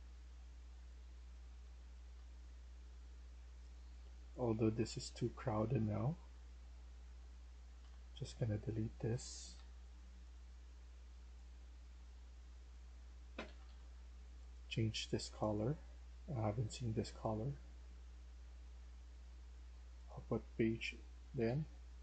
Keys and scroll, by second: 1.8-3.0 typing, 7.7 Delete, 9.5 Delete, 13.3 Escape, 13.6 Escape.